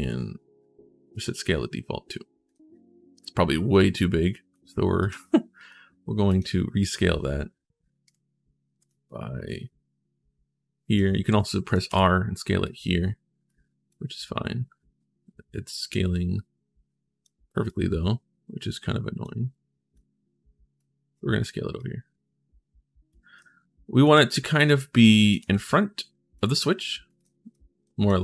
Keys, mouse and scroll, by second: 0.9 click, 2.2-4.3 right drag, 2.3 d, 3.7 s, 4.8 click, 4.8 a, 5.4 w, 6.0 click, 7.8 click, 8.7 click, 16.5 click, 17.4-19.0 drag, 19.7 click, 21.6-22.9 drag, 22.9-23.9 typing, 23.1 right click, 25.2 w, 26.6 click, 26.8-27.6 typing, 27.0 right click.